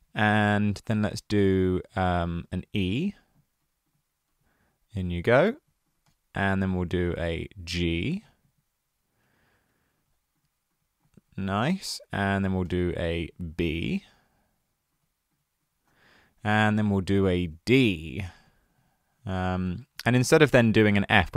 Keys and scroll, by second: 0.3 super+c, 1.6 super+v, 7.1 super+v.